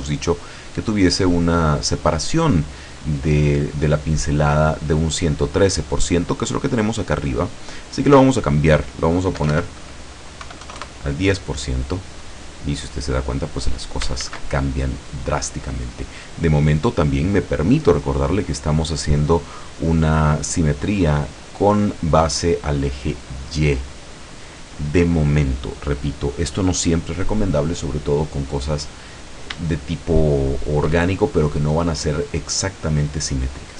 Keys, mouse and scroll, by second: 8.0 click, 9.4 BackSpace, 10.4 KP_1, 10.6 KP_0, 10.9 KP_Enter, 12.4-14.0 drag, 14.3 ctrl+z, 16.2-16.6 scroll down 2, 28.3 scroll up 2, 28.4-28.9 scroll down 2, 28.9-29.2 scroll up 2, 29.9-31.1 shift+middle drag, 31.2-33.7 shift+middle drag.